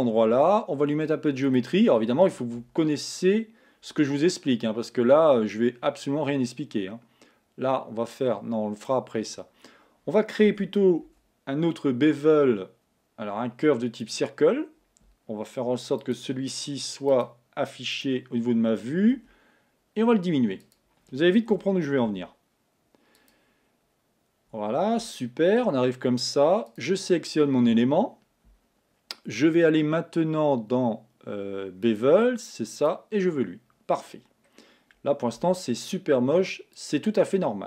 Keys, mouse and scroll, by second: 1.6 click, 6.1-9.1 drag, 10.5 Tab, 11.2 shift+a, 16.1 click, 17.2-19.3 drag, 19.3 s, 21.5 g, 23.7-25.2 scroll up 3, 25.2-26.8 shift+middle drag, 26.8 click, 31.9-34.2 drag, 34.2 scroll down 1, 35.5 z.